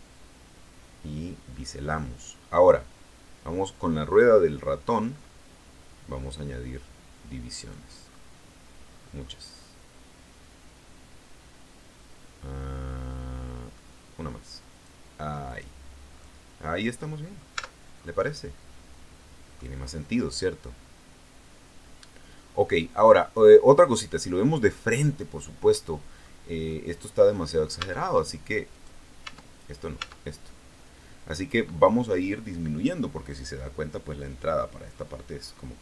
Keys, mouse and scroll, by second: 4.8 middle click, 7.9 middle click, 8.6 middle click, 9.2 middle click, 13.6-15.4 scroll up 2, 15.4 click, 16.0 middle click, 16.2 scroll up 2, 17.4 Tab, 17.8 scroll down 2, 18.1-19.6 middle drag, 20.0-25.0 middle drag, 25.6 middle click, 26.6 middle click, 27.2 right click, 27.7 Tab, 28.6 right click, 29.2 Tab, 29.5 right click, 29.9 Tab.